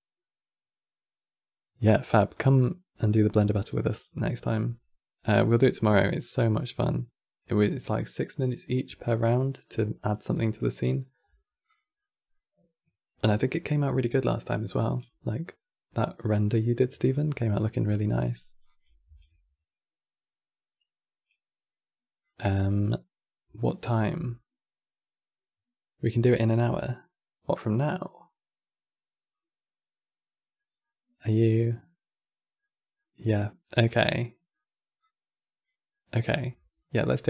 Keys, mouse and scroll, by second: 3.3-6.3 middle drag, 10.5 middle click, 10.9-11.3 scroll up 6, 11.3 click, 11.7-14.8 middle drag, 17.6-18.3 middle drag, 18.3 click, 21.1 shift+d, 30.5-33.4 middle drag, 33.4-33.9 scroll down 5, 33.9 middle click, 34.7 click, 35.6 middle click, 35.9-36.2 scroll down 6, 36.2-37.2 middle drag.